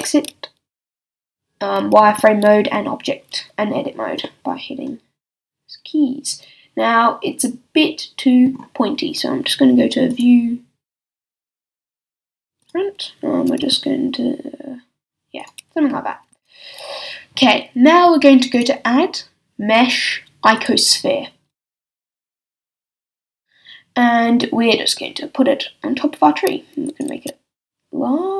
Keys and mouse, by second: 2.1 z, 4.4-6.2 middle drag, 8.9-11.4 middle drag, 13.4 s, 16.3 a, 24.4-27.0 drag, 27.2 s.